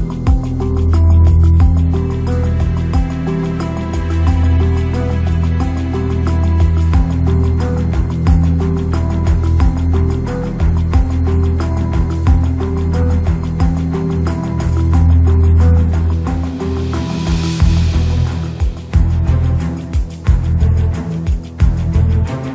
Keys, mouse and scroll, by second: 1.6 r, 3.1 r, 6.3 click, 12.5 click, 17.1 click, 17.9 click, 20.2-22.1 drag.